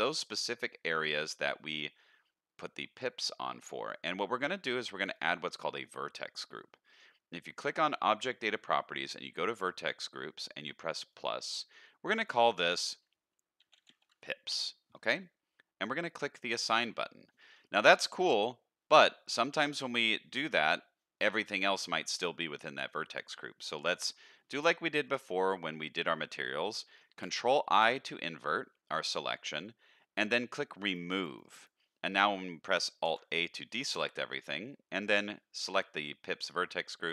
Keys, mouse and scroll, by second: 0.2 middle click, 1.3 middle click, 5.1 click, 11.1 click, 12.2-14.5 drag, 16.3 click, 16.6 click, 17.8 middle click, 25.0 click, 27.2 ctrl+i, 30.8 click, 31.3 click, 33.0 alt+a.